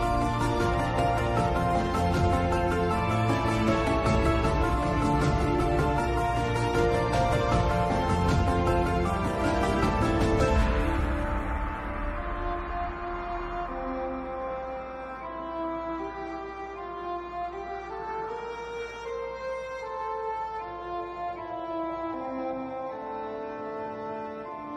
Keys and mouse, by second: 2.2 a, 4.0 shift+click, 6.0 ctrl+p, 9.5 click, 10.0 KP_7, 10.3-11.7 middle drag, 16.1 KP_7, 18.8-20.0 middle drag, 21.0 KP_7, 23.0 n.